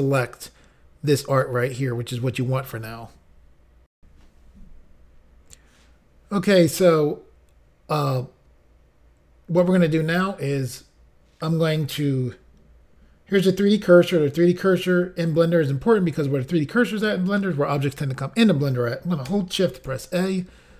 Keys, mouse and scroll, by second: 3.9 Insert.